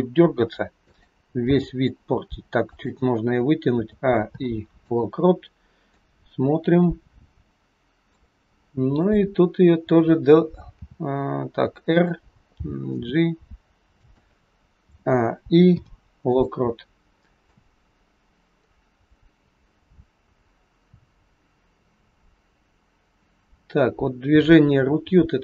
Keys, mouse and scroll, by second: 1.5 g, 3.8 a, 4.2 i, 6.0 click, 10.9 r, 12.5 g, 14.8 a, 15.6 i, 17.4 click.